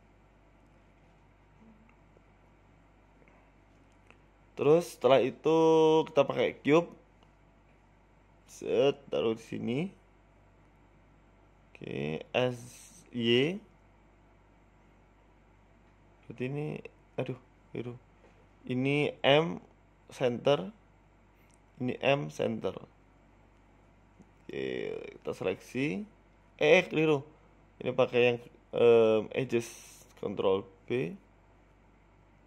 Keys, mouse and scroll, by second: 0.7 s, 1.9 shift+middle click, 3.5 Tab, 3.7 Tab, 5.3 Tab, 5.3 right click, 5.8 Tab, 6.4 shift+a, 7.9 s, 8.6-9.3 scroll down 8, 9.3-9.8 scroll down 1, 9.3 g, 9.8 s, 10.4-10.9 scroll up 4, 10.9-11.3 scroll up 1, 10.9 g, 11.7 s, 12.8 scroll up 3, 13.1 middle click, 13.7 s, 15.3 middle click, 15.7 KP_1, 16.2 middle click, 17.1 click, 17.3 middle click, 17.8 right click, 18.8 middle click, 19.3 ctrl+z, 19.7 shift+right click, 20.2 m, 21.1 ctrl+z, 22.1 m, 23.1 right click, 23.4 shift+right click, 23.9 m, 24.4 middle click, 24.7 Tab, 25.4 Tab, 25.4 KP_1, 25.8 click, 26.4 shift+click, 27.4 ctrl+b, 29.1 click, 29.4 click, 29.9 shift+click, 31.0 shift+click, 31.0 s.